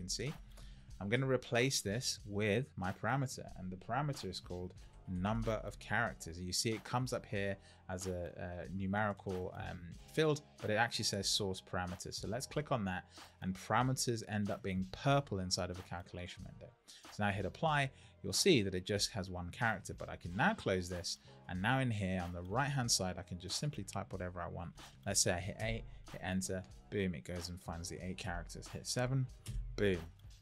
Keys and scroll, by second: 25.5 Return, 29.4 Return.